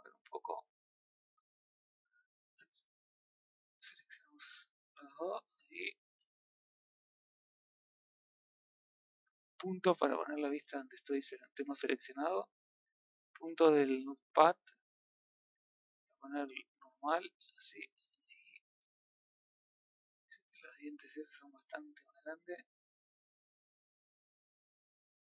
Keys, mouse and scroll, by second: 5.9-9.1 middle drag, 9.8 KP_Decimal, 10.6 scroll down 1, 10.9-12.3 middle drag, 13.2 click, 13.8 shift+click, 14.6-16.6 middle drag, 16.6-17.8 drag, 19.0 middle click, 20.3-21.4 middle drag, 22.2 click, 22.6 shift+click, 23.4 click, 24.4 scroll down 1, 24.5-25.3 middle drag.